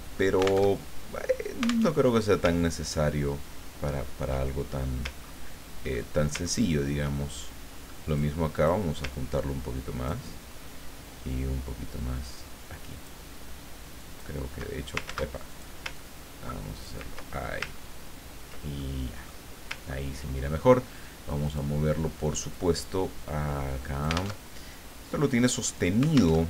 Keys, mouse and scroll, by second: 0.7 alt+Tab, 1.8 alt+Tab, 2.5-3.0 ctrl+scroll down 2, 3.6 ctrl+scroll up 2, 4.0-4.4 ctrl+scroll down 2, 4.4 ctrl+click, 6.0 ctrl+click, 6.7-7.3 ctrl+scroll up 1, 8.0 click, 8.5 click, 9.1-10.3 ctrl+drag, 11.3-13.2 ctrl+drag, 14.0 ctrl+click, 15.0 ctrl+z, 15.5 ctrl+click, 15.9-17.1 ctrl+drag, 17.4-17.8 ctrl+scroll up 2, 17.8-18.4 ctrl+scroll down 4, 18.7 ctrl+click, 19.9 ctrl+scroll up 2, 21.4 click, 22.5-24.4 drag, 24.4 alt+Tab, 26.3 alt+Tab.